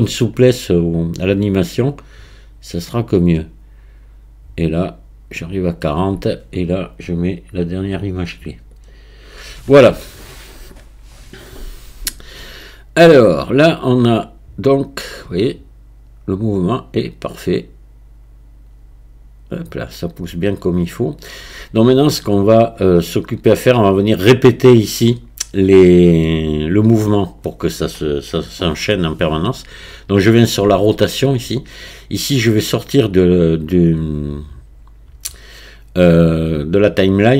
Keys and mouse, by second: 1.6 click, 7.7-8.9 drag, 14.2-17.5 drag, 18.0-21.2 drag, 26.4 click, 27.2 click, 33.2-37.3 drag.